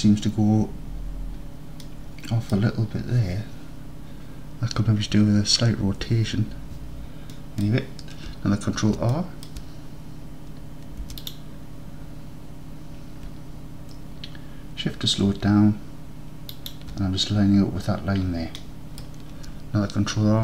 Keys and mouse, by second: 1.9 click, 2.1 middle click, 2.4 middle click, 2.6 middle click, 7.4 middle click, 9.2 middle click, 10.9 ctrl+r, 16.6 shift+click, 18.7 middle click.